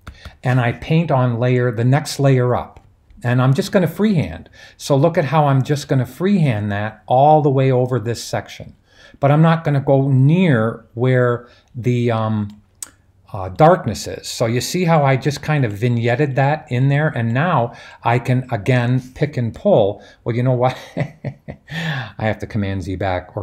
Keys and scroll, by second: 0.0-0.3 typing.